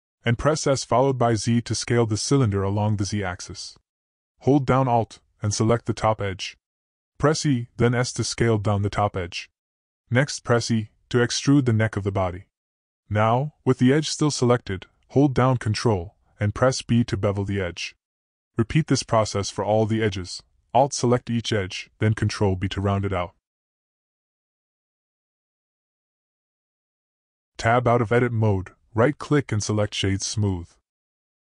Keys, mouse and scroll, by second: 0.9 s, 4.6 alt+click, 6.1 e, 10.8 e, 13.8 ctrl+b, 16.7 alt+click, 17.8 ctrl+b, 20.7 alt+click, 21.5 ctrl+b, 23.3 middle click, 25.8 ctrl+b, 27.7 middle click, 27.8 click, 27.9 middle click, 28.0 click, 28.6-29.6 middle drag, 29.3 Tab, 29.6-31.4 right drag.